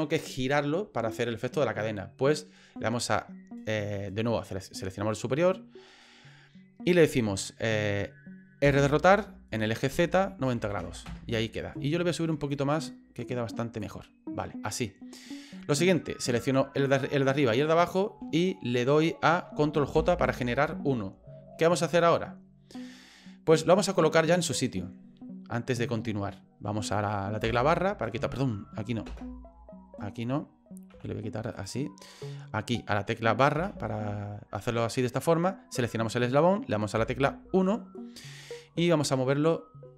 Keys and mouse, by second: 4.8 right click, 8.6 r, 12.5-13.8 drag, 17.6 shift+right click, 19.9 ctrl+j, 27.4 KP_Divide, 29.1 KP_0, 30.9 KP_Divide, 31.5 right click, 33.6 KP_Divide, 35.7 right click, 36.9 KP_1, 39.0 shift+middle click.